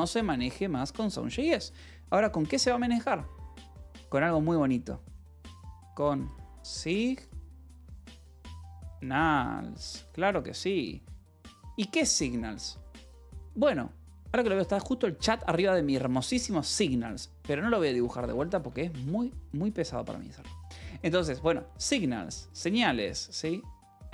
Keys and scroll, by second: 3.0 ctrl+z, 17.9 ctrl+z.